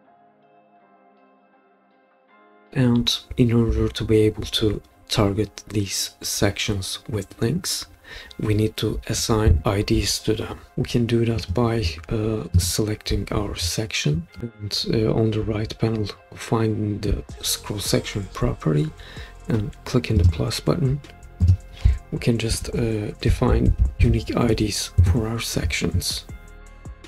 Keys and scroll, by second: 0.0 Return, 1.0 typing, 2.2 typing, 23.0-24.5 typing, 25.0 Return.